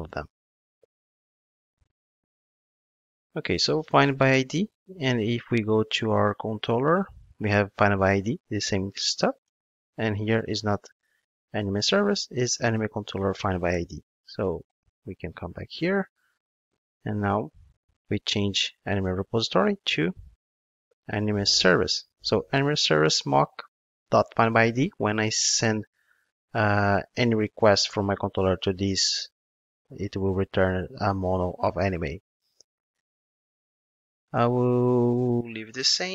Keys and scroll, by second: 0.1 ctrl+Tab, 2.1 super+v, 8.4 ctrl+Tab, 12.6 Return, 18.0 super+/, 22.1 Return.